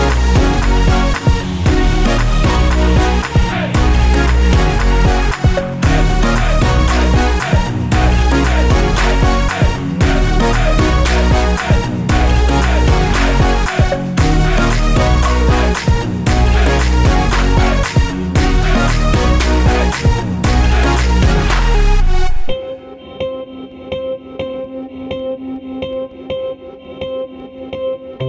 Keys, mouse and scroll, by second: 0.8 click, 0.8-1.4 scroll down 1, 1.5 click, 4.9-5.3 scroll down 1, 6.7 click, 7.4 click, 10.6 F4, 12.8 F9, 15.6 ctrl+click, 19.8 click, 20.0 double click, 22.9 ctrl+click, 25.4 ctrl+click, 27.8 ctrl+click.